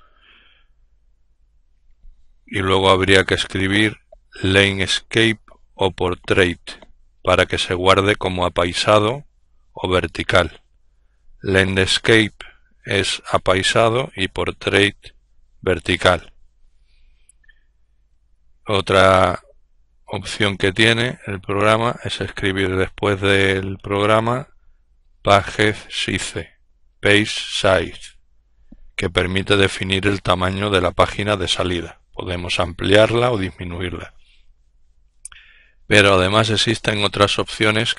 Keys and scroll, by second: 20.1-23.1 typing, 24.4 typing, 25.9-27.2 typing.